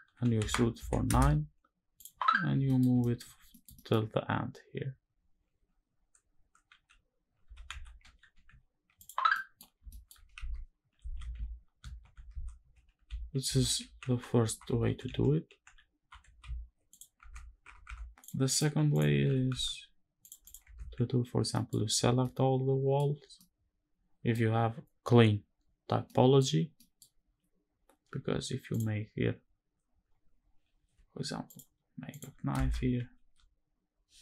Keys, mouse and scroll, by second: 0.1 z, 0.5 KP_9, 0.8 KP_Enter, 1.6 click, 2.0-2.4 scroll down 4, 2.4 middle click, 2.7 shift+middle click, 3.1 scroll down 2, 3.2 middle click, 3.4 shift+middle click, 3.7-6.8 scroll up 1, 7.1 g, 7.4 x, 7.9 y, 8.6 ctrl+click, 9.0 middle click, 9.6 shift+middle click, 9.6 shift+scroll down 2, 10.1 shift+`, 16.9 Tab, 17.4 Tab, 17.6 Tab, 17.9 click, 18.2 click, 18.6 click, 18.9 g, 19.2 x, 19.9 click, 20.1 click, 20.4 Tab, 21.1-21.9 scroll down 4, 21.2 middle click, 21.9 middle click, 23.1 middle click, 25.6 scroll down 1, 25.7 middle click, 26.4 scroll down 1, 26.5 middle click, 28.4 click, 30.6 k, 33.0 ctrl+r.